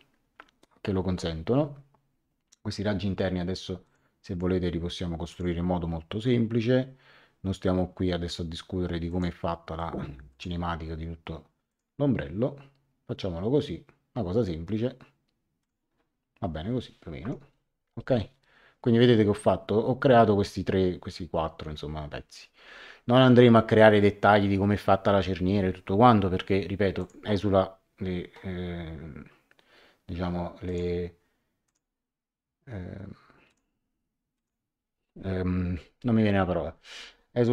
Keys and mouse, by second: 3.8 click, 5.3 click, 9.0 click, 10.3 click, 11.6 click, 15.6 click, 17.2 Escape, 26.9 click, 30.6 click, 33.4 click.